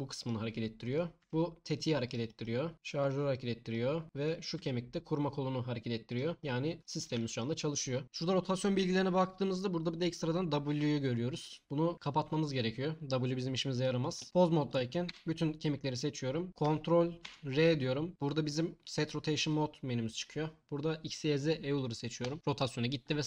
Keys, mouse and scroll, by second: 0.9 click, 1.2 g, 2.7 g, 4.2 click, 4.5 g, 8.0 n, 15.1 a, 17.2 ctrl+r.